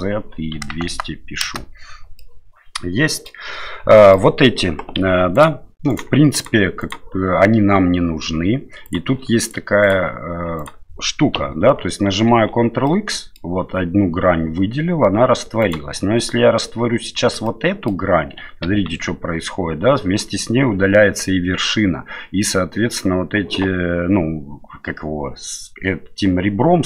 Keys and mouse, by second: 2.2-3.3 middle drag, 3.9 middle click, 5.0 2, 5.3 right click, 5.9 right click, 6.3 right click, 6.8 right click, 8.8 right click, 9.4 right click, 10.6 right click, 12.3 ctrl+x, 12.8 middle click, 15.6 right click, 17.4 middle click, 18.6 ctrl+x.